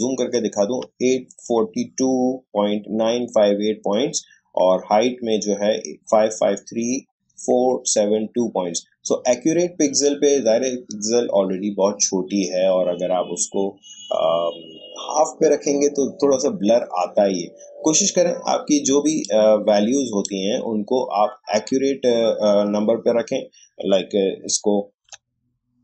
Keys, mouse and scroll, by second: 22.1 shift+scroll down 1, 25.0 Delete.